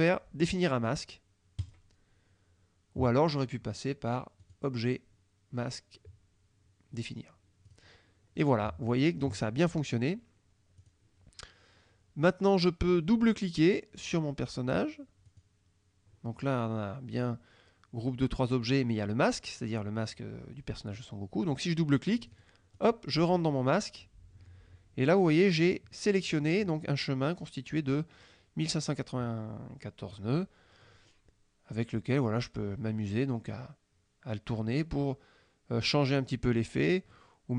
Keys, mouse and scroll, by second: 1.7 click, 4.5 click, 7.7 click, 8.4 middle click, 10.9 click, 15.4 click, 22.2 click, 22.9 click, 32.4-37.1 drag.